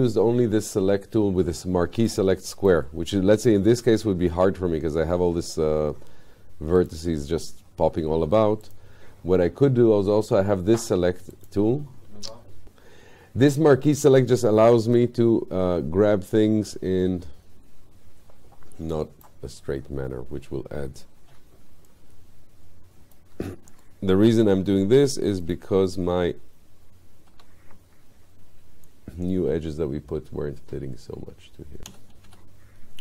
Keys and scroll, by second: 27.4 w.